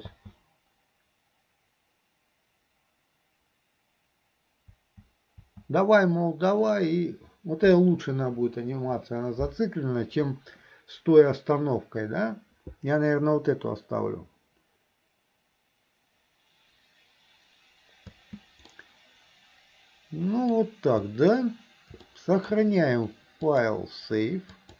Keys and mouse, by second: 0.1 space, 4.8 space, 6.9-8.0 middle drag, 18.2 space, 18.8-20.5 middle drag, 22.1 shift+middle click, 23.5-24.7 drag.